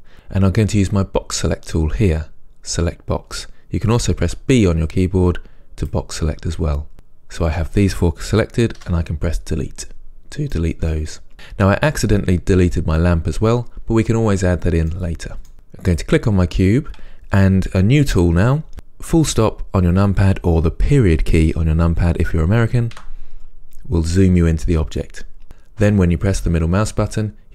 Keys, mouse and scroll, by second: 4.4 b, 8.8 Delete, 10.0-10.6 scroll down 1, 10.6-16.0 middle drag, 15.5-16.0 scroll up 2, 16.0 click, 23.0 KP_Decimal, 25.4 scroll down 1, 25.4-27.5 middle drag.